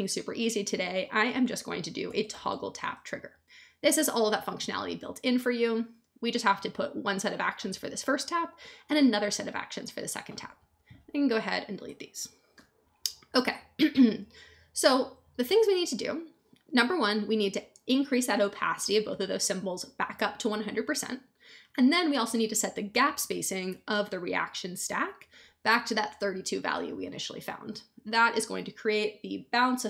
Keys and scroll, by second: 1.8-2.8 typing, 11.8 BackSpace.